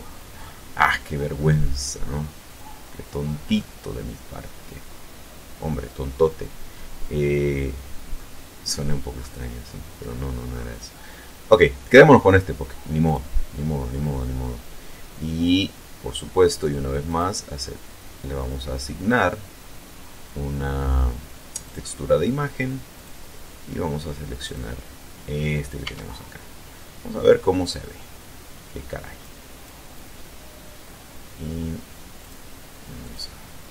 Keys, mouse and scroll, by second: 2.1 click, 3.1-3.5 scroll up 1, 3.9-4.5 scroll up 1, 6.2-7.3 scroll up 2, 7.8 scroll down 2, 8.3-9.9 scroll up 6, 12.7 click, 13.8-14.5 scroll down 2, 14.6-15.0 scroll up 2, 16.7 click, 18.2 click, 21.3 click, 22.5 click, 24.1 click, 25.4 Tab, 28.8 click, 31.8 click, 32.6 click.